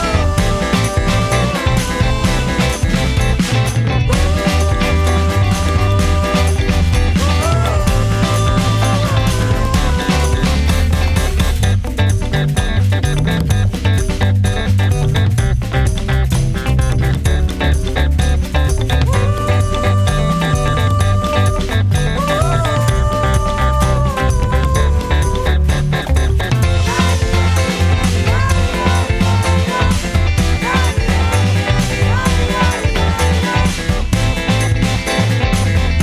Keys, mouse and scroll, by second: 0.5 scroll up 1, 2.0 middle click, 2.5 scroll up 1, 4.7 click, 5.3-6.0 scroll down 1, 6.1 click, 6.6 scroll down 1, 6.9 click, 7.6-8.3 scroll up 1, 8.3 Left, 9.5 scroll down 1, 10.4 click, 10.9-11.3 scroll down 1, 12.2 click, 13.8 scroll down 1, 19.1 click, 25.0 space, 27.5 Return, 30.5 click, 31.8-32.6 scroll down 1, 33.9 click.